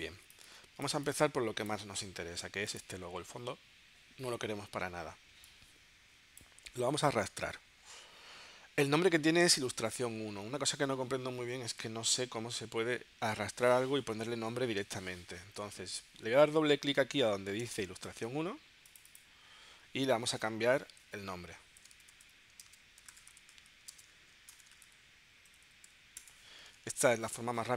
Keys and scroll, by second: 0.2 space.